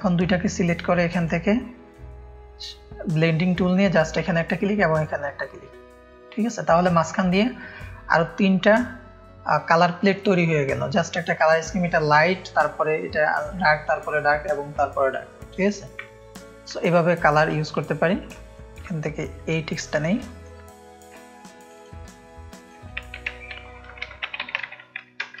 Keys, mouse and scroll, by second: 1.1-4.7 drag, 4.9 click, 11.0 click, 16.1 ctrl+space, 16.1 ctrl+click, 16.9 shift+click, 17.5 click, 18.3 space, 18.4 click, 18.7-19.7 alt+shift+drag, 19.9 click, 20.1 ctrl+space, 20.2 ctrl+click, 22.4 click, 23.9-25.4 typing.